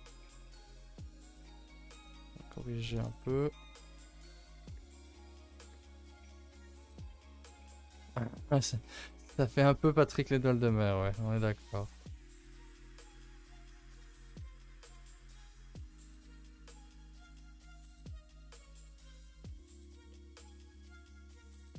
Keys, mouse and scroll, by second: 0.5 k, 3.2 middle click, 3.8 2, 4.0 click, 4.9 ctrl+End, 5.5 1, 6.4 middle click, 6.6 a, 6.8 a, 7.1-7.7 scroll down 8, 7.7 middle click, 8.3 ctrl+s, 8.5-11.2 middle drag, 11.2 scroll up 5, 11.5 a, 11.6 a, 11.7 shift+middle click, 12.2 scroll up 2, 12.8 click, 13.0 middle click, 13.4 g, 14.9 click, 15.3 g, 17.2-18.6 middle drag, 18.6 Tab, 18.9-19.8 middle drag, 19.8 click, 20.1-21.3 middle drag, 21.3 click, 21.6 scroll down 4.